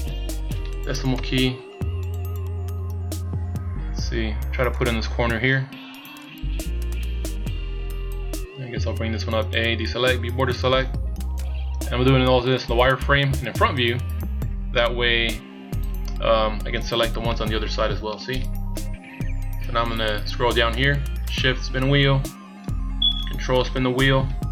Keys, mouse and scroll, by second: 1.1 KP_Decimal, 1.8-3.6 scroll up 13, 4.7 click, 6.2 click, 7.7-8.1 scroll down 3, 8.4 scroll down 1, 9.4 a, 10.0 b, 11.4 click, 16.7-17.3 scroll down 4, 17.3 middle click, 18.7 KP_1, 19.5-20.0 scroll down 2, 21.4-23.1 shift+scroll down 12, 23.3 ctrl+scroll down 3, 23.7-24.5 ctrl+scroll up 11.